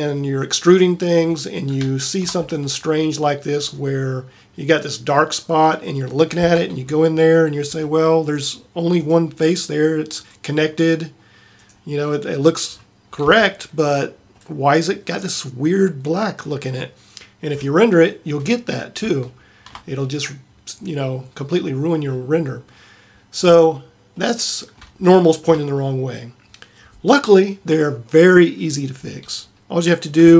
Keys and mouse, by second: 3.8-5.3 middle drag, 6.5 Tab, 10.5 click, 13.5 Tab, 20.5-22.0 middle drag, 23.1-24.3 middle drag, 29.8-30.3 middle drag.